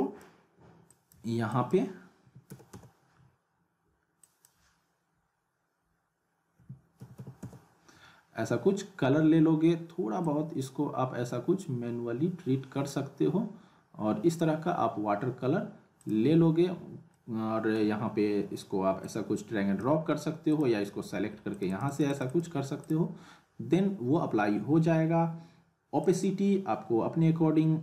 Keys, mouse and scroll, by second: 4.2 click, 10.2-11.1 drag, 14.3 click, 17.1-17.7 middle drag, 19.0-20.0 drag, 26.0 click.